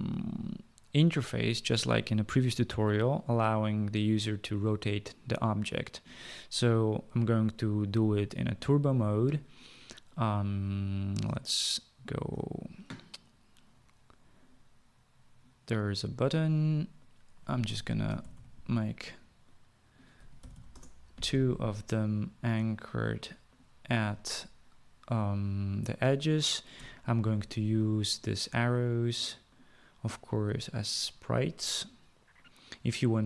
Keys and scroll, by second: 18.0-19.0 typing, 20.1-21.2 typing.